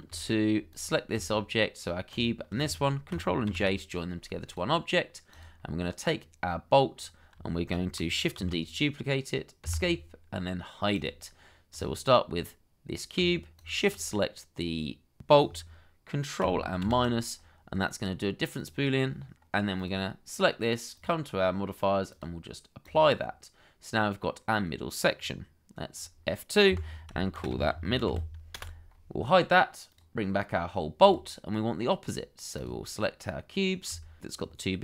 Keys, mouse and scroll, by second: 0.1 shift+middle click, 2.1 shift+click, 3.5 ctrl+j, 6.9-7.3 scroll up 1, 7.5 shift+middle click, 8.3 shift+d, 9.6 Escape, 13.5 shift+click, 16.8 ctrl+-, 27.0 F2, 27.3-28.1 typing, 28.5 Return.